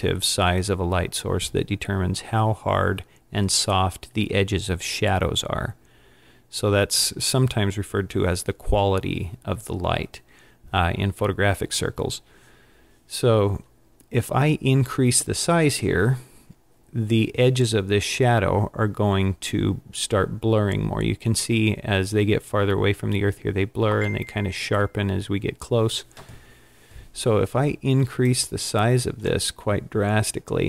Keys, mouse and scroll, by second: 28.3 click.